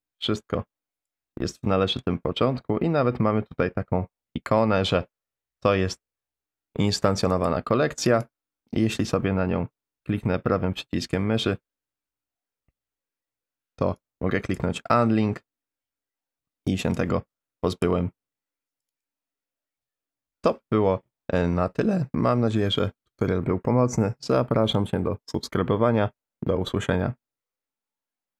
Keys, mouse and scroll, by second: 7.4 click, 8.1-14.6 right drag, 16.7 click, 18.9 right click.